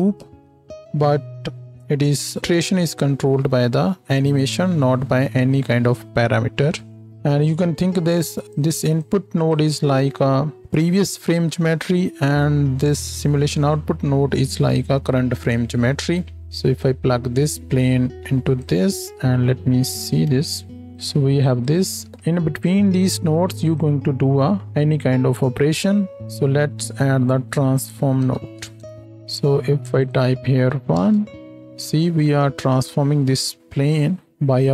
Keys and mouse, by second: 0.3 ctrl+space, 20.1 ctrl+shift+click, 21.7-23.6 shift+drag, 22.0 shift+a, 26.2 shift+a, 29.0-30.1 drag.